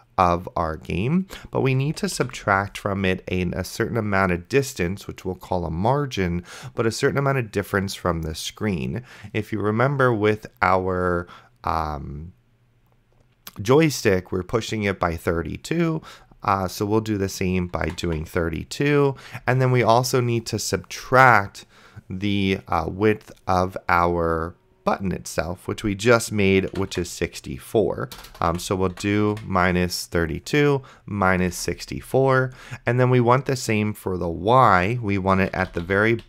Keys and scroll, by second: 2.1 space, 2.2 -, 18.1 2, 19.4 space, 26.9 4, 28.2-29.8 typing, 31.8 ctrl+s, 35.2-36.2 typing.